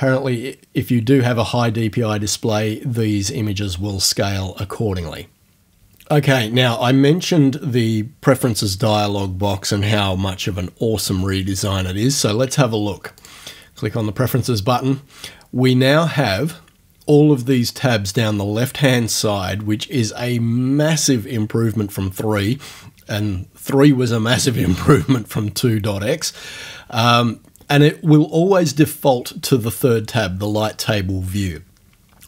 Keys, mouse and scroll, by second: 13.2 click.